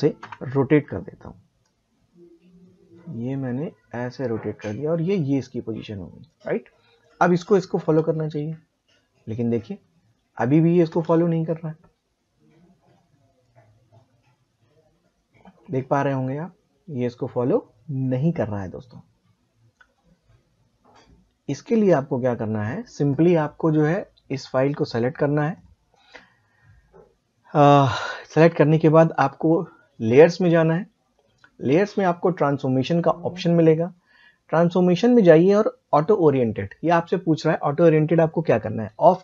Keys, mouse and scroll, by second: 0.2 r, 1.6-7.8 drag, 7.8 space, 10.9 space, 13.4 click, 24.8 click, 27.9 click, 35.8 click.